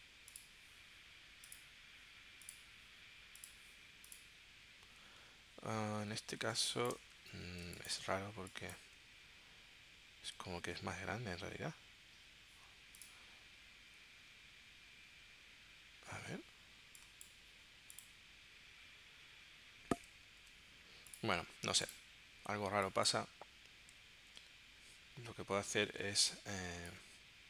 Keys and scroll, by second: 6.5 space, 7.6 space, 10.5 super+z, 20.3 super+z, 24.1 super+z.